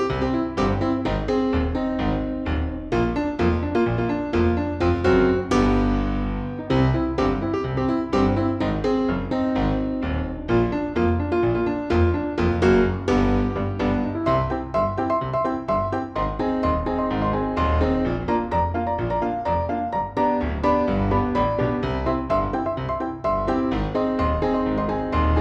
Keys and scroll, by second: 0.8 F2, 7.0 space, 7.4 F3, 10.5 space, 11.9 Delete, 21.5 F4, 21.9 Escape.